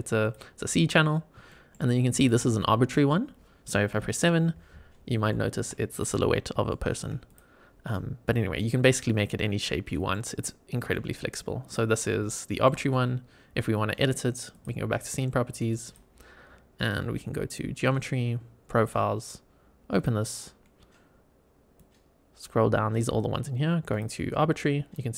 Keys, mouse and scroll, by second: 0.1 click, 1.1 scroll down 2, 1.4 shift+middle drag, 2.1 click, 2.5 middle click, 3.8 KP_7, 4.8 scroll up 2, 5.2-5.5 shift+middle drag, 5.8 click, 6.2 scroll up 2, 6.6 shift+middle drag, 7.2 click, 8.1-8.5 scroll down 3, 8.5-10.0 middle drag, 10.3 scroll down 2, 10.8 middle click, 11.6 click, 11.9 scroll down 2, 12.2-12.6 shift+middle drag, 14.4 click, 15.8 click, 17.3 click, 18.7 click, 19.8 click, 20.4-21.3 scroll down 3, 21.7 click, 22.7 scroll down 2, 23.8 click.